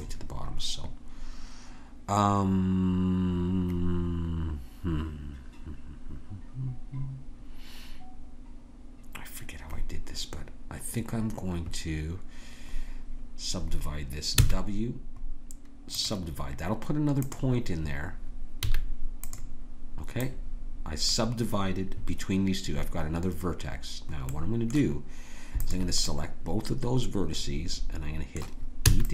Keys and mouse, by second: 14.4 w, 17.2-21.9 drag, 18.6 a, 24.3-27.9 drag, 28.9 e.